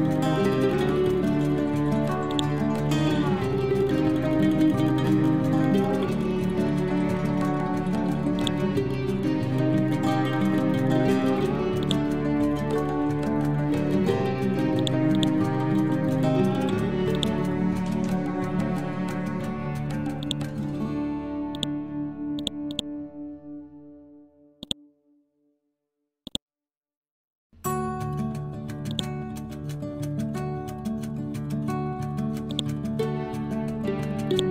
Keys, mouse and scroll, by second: 0.4-2.2 scroll up 1, 2.3-4.8 drag, 4.8 scroll down 1, 7.4-7.7 scroll up 1, 8.4 ctrl+click, 9.5-10.3 scroll down 1, 10.3-10.7 scroll up 1, 11.9-13.4 ctrl+drag, 13.4 scroll down 1, 14.8 click, 15.6-16.1 scroll down 1, 16.1 scroll up 1, 17.2 click, 17.8-19.2 scroll down 1, 21.6 click, 22.7 right click, 24.6-31.3 drag, 31.3 scroll up 1, 32.6 click, 34.3-34.5 ctrl+drag.